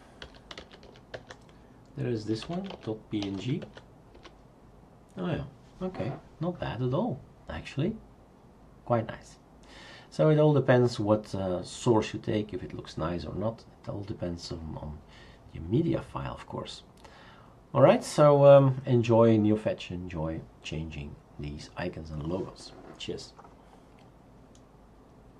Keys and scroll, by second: 0.0-1.3 typing, 2.4-3.9 typing, 4.1 Return.